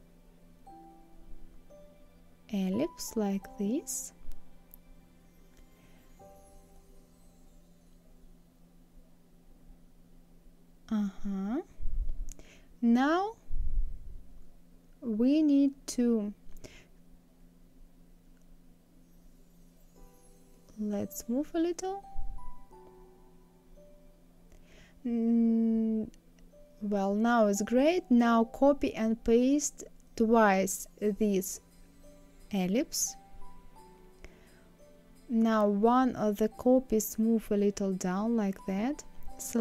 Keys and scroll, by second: 32.2 ctrl+c, 33.6 ctrl+f, 34.9 ctrl+c, 36.2 ctrl+f.